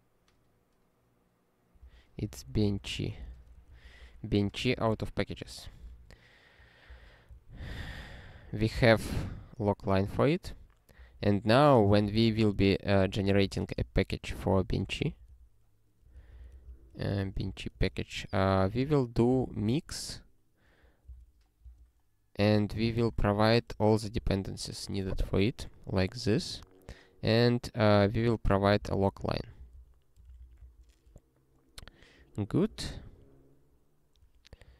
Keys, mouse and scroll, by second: 1.8 super+o, 1.9-5.3 typing, 3.7 ctrl+f, 5.9 ctrl+e, 6.9 ctrl+e, 7.4 ctrl+e, 8.7 Return, 10.9 Return, 11.2 ctrl+p, 12.0 Return, 12.1-17.8 typing, 17.4 Return, 19.1-20.2 typing, 21.2 Return, 21.6-24.2 typing, 28.3-30.4 typing, 30.6 ctrl+n, 33.2 ctrl+alt+k, 34.6 ctrl+/.